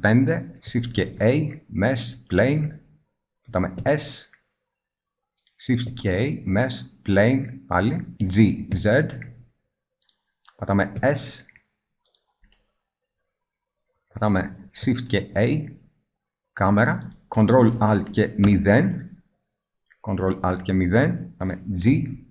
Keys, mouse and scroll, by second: 0.8 shift+a, 3.6 s, 5.4 drag, 5.7 shift+a, 8.2 g, 10.9 s, 15.0 shift+a, 18.3 ctrl+alt+KP_0, 21.7 g.